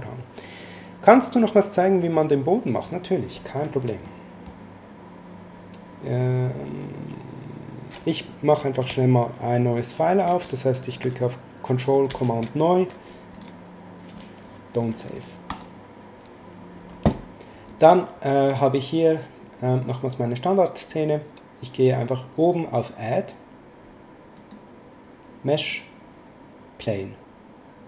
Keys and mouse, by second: 4.0 middle click, 12.1 ctrl+n, 13.3 click, 15.5 click, 24.3 click.